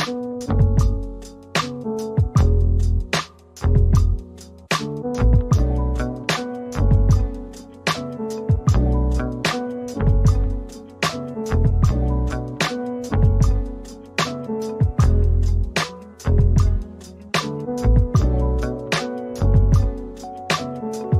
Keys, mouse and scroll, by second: 1.0 double click, 7.3 double click, 7.7 right click, 8.4 double click, 9.1 right click, 9.8 typing, 10.3 double click, 11.4 typing, 11.8 Return, 11.8 double click, 12.8 middle click, 14.7 alt+click, 17.5 scroll up 1, 17.8 alt+click, 20.3 alt+click.